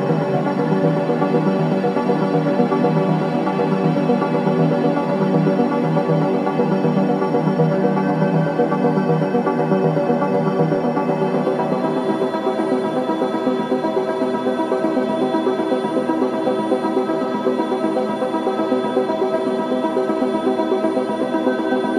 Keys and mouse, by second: 0.0 typing, 1.5-2.7 typing, 2.0 click, 4.4 typing, 5.2-6.5 drag, 6.4-8.0 typing, 7.3-8.7 drag, 9.8 typing, 11.2 ctrl+alt+click, 11.2 typing, 12.1 alt+shift+click, 13.2 alt+shift+click, 14.7 click, 16.0-18.0 typing, 17.8-20.9 drag.